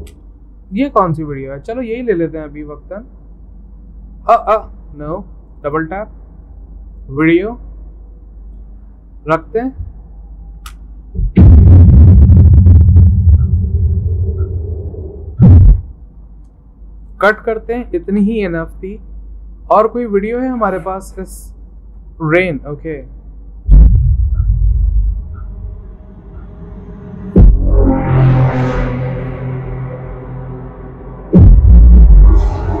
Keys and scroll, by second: 16.5 c, 18.2 Delete.